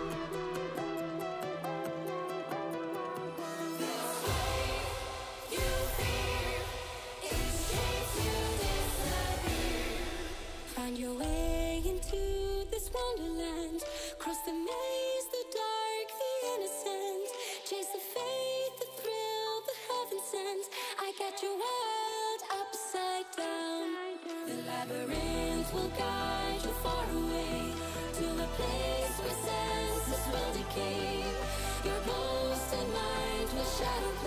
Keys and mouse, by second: 2.8 ctrl+s, 3.5 middle click, 4.5 middle click, 5.1 middle click, 5.6 middle click, 6.1 middle click, 6.5 middle click, 6.8 middle click, 7.5 click, 7.5 middle click, 7.5 right click, 9.3 shift+a, 15.7-16.6 drag, 16.9 click, 17.7 click, 18.5 click, 19.2 click, 19.7 shift+a, 22.5 click, 22.8 click, 23.7 middle click, 24.3-25.1 drag, 28.9 middle click, 29.4 shift+click, 29.6-31.4 middle drag, 31.4 click, 32.7 click, 34.1-34.2 drag.